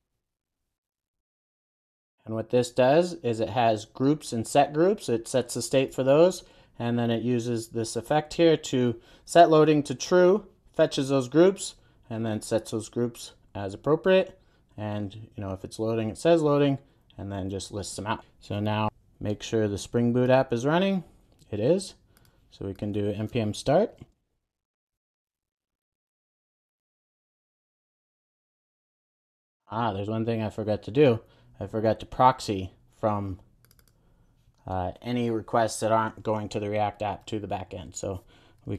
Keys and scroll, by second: 0.8 Return, 1.2 super+s.